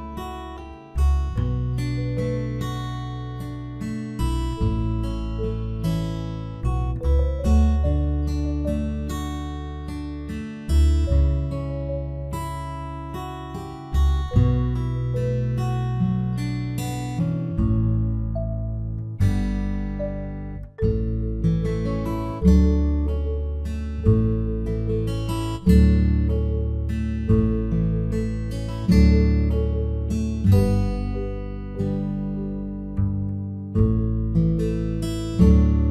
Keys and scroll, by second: 16.5 ctrl+0, 34.0 ctrl+0, 35.8 ctrl+v.